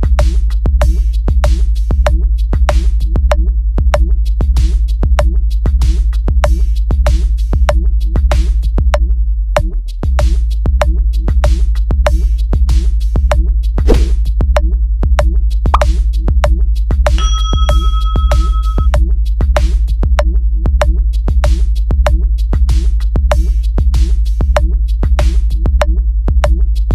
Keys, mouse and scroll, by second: 0.1 click, 1.5 click, 2.8 click, 3.3 drag, 3.9 click, 4.5 click, 5.7 click, 6.0 click, 6.7 click, 9.2 click, 10.0 click, 11.0 click, 12.2 click, 12.9 click, 14.9 click, 15.6 click, 20.7 click, 21.6 click, 22.5 click, 24.0 click.